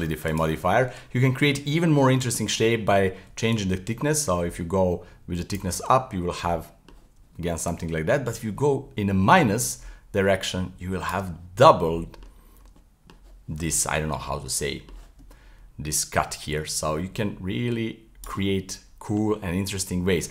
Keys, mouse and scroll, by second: 1.8-3.5 middle drag, 3.5-5.9 shift+drag, 5.9-7.7 middle drag, 7.7-10.7 shift+drag, 11.4-12.5 middle drag, 12.5 scroll up 1, 12.8-16.0 middle drag, 16.0-18.5 shift+drag, 18.5-20.3 middle drag.